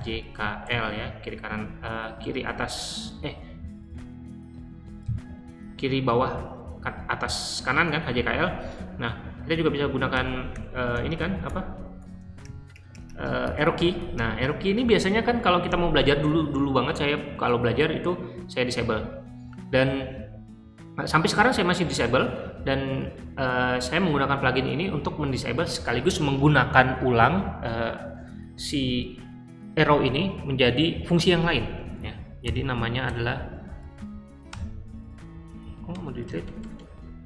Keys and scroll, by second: 0.0-1.1 typing, 5.0 j, 9.4 Up, 10.0 Up, 10.4 Up, 10.8 Up, 11.1 Up, 11.3 Down, 11.7 Down, 11.9 Down, 12.1 Down, 12.3 Right, 13.0 Right, 32.4 o, 33.0 BackSpace, 34.4 BackSpace, 35.8-36.7 typing.